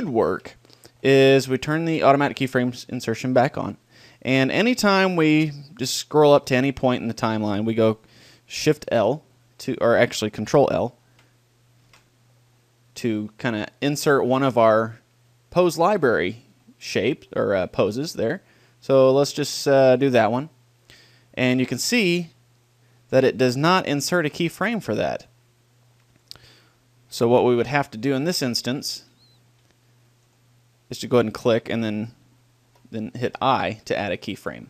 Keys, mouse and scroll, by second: 2.1-3.8 drag, 4.0-5.8 drag, 7.2 middle click, 7.7-9.3 drag, 8.8 shift+l, 11.1 ctrl+l, 11.9 ctrl+l, 22.7-23.9 middle drag, 23.9-27.3 drag, 28.3 ctrl+l, 33.3 i.